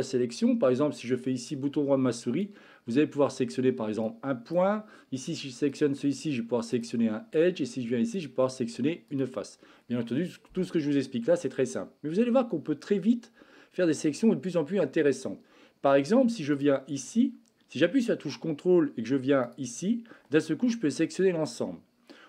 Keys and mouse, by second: 1.7 click, 4.3 click, 8.1 click, 9.1-16.6 drag.